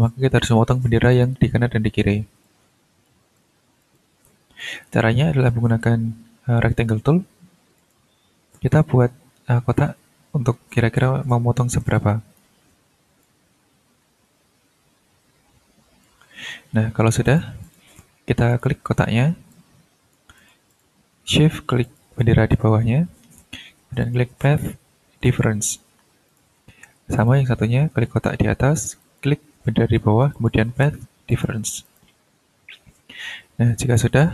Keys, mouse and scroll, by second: 1.1 click, 2.4-3.2 ctrl+drag, 3.3-4.8 ctrl+drag, 4.8 ctrl+click, 5.2-5.7 ctrl+scroll down 3, 5.9 shift+scroll up 2, 7.8 click, 8.7-12.6 drag, 13.2-16.2 drag, 17.2 click, 17.6 click, 18.5 click, 19.0-19.3 ctrl+scroll up 2, 19.5-20.3 ctrl+drag, 20.4 click, 21.8 shift+click, 24.0 click, 25.2 click, 26.3 shift+click, 26.6-27.0 shift+scroll up 2, 27.1 shift+click, 29.0 shift+click, 30.3 shift+click, 31.3 click, 31.8 click, 32.2-32.6 ctrl+scroll down 2, 33.1 ctrl+scroll up 2, 33.9-34.3 drag.